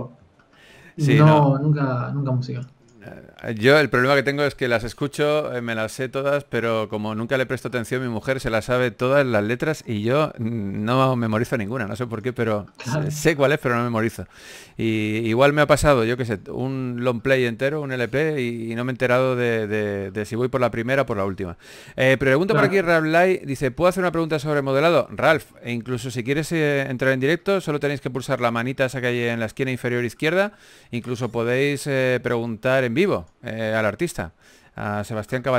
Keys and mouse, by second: 0.3 a, 0.7 KP_3, 1.3 middle click, 4.7 g, 4.7 f, 5.2 f, 9.0 f, 10.0 click, 11.4 f, 13.7 f, 16.9 f, 23.4 click, 24.2 f, 31.3 f, 31.9-33.0 drag, 34.4 a.